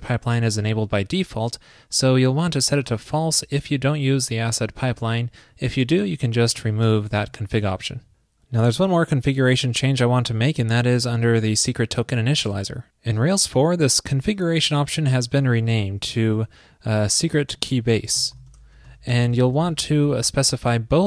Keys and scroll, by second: 6.5 shift+super+Right, 7.3 super+s, 15.8 super+c, 16.3 super+v.